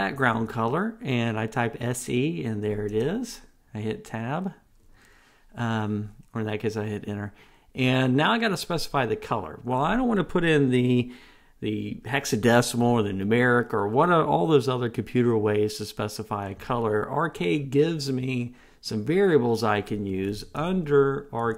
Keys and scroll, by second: 3.2 Return.